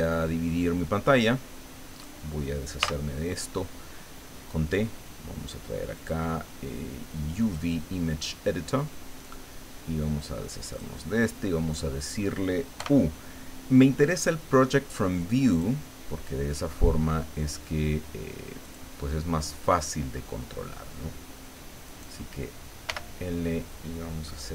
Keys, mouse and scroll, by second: 2.8 t, 5.9 click, 7.4 click, 9.0-9.4 scroll down 2, 10.6 click, 11.8-12.1 scroll up 1, 12.7 u, 18.6 click, 19.6-20.0 scroll up 1, 20.1 scroll up 1, 21.8 right click, 22.8 l.